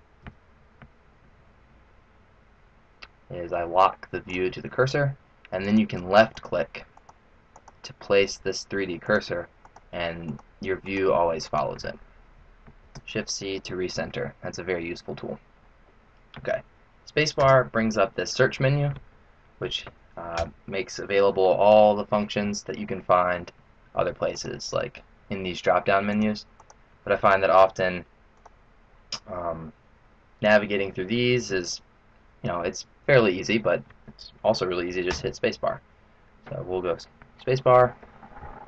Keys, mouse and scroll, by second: 0.1 n, 1.8-2.1 scroll up 5, 4.2 click, 5.5 click, 6.9 click, 7.5 click, 8.9 click, 9.5 click, 10.2 click, 10.8 click, 11.4 click, 12.6 shift+c, 17.3 space, 24.4 click, 26.5 click, 35.0 space.